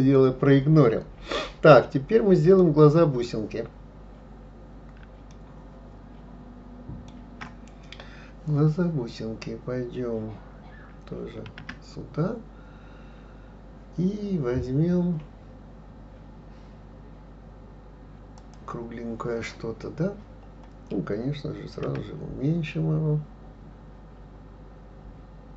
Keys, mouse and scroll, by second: 5.3-8.3 shift+middle drag, 11.4 shift+a, 21.8 s.